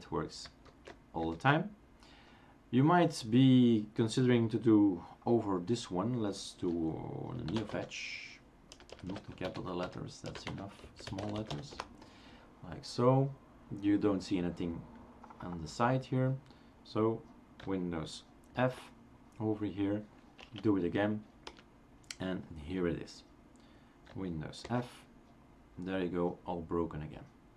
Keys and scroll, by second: 0.7 super+f, 1.3 super+f, 7.3-12.0 typing, 9.1 Caps_Lock, 18.6 super+f, 20.4 Up, 21.6 Return, 24.7 super+f.